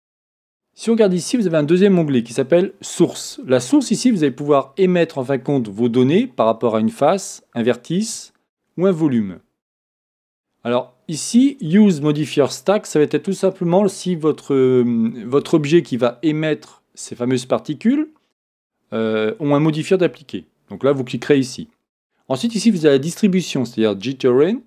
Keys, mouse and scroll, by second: 1.2-4.3 drag, 22.7 click.